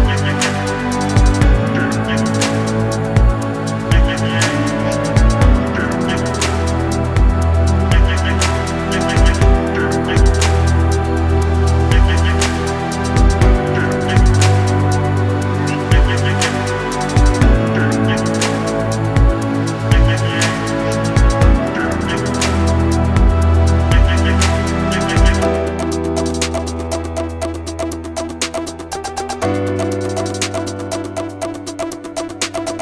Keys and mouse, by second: 0.1 shift+click, 1.5 click, 1.8 a, 2.4 u, 2.9 a, 3.4 shift+middle click, 4.3-5.5 middle drag, 5.7 shift+middle click, 6.2 click, 6.8 shift+click, 8.8 ctrl+e, 9.4 a, 9.9 middle click, 10.4 shift+middle click, 10.9 click, 11.2 shift+click, 11.4 ctrl+e, 11.7 a, 12.1 a, 12.4 u, 12.6 a, 13.1 shift+middle click, 14.4 middle click, 15.1 Tab, 17.2 Tab, 17.5-19.0 middle drag, 19.3-20.4 shift+middle drag, 24.2 Tab, 25.7 Tab, 26.1 a, 26.7 u, 27.1 a, 27.6 shift+middle click, 28.5 middle click, 29.0 shift+middle click, 29.5 middle click, 31.4 click, 31.7 middle click.